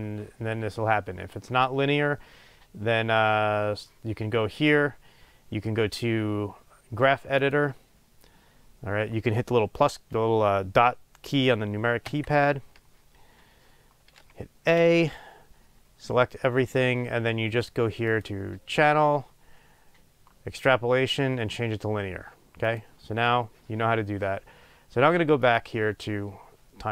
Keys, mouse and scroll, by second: 6.5-6.9 drag, 7.3 click, 8.3 scroll down 1, 8.5 middle click, 9.0 scroll up 1, 12.8-23.0 drag.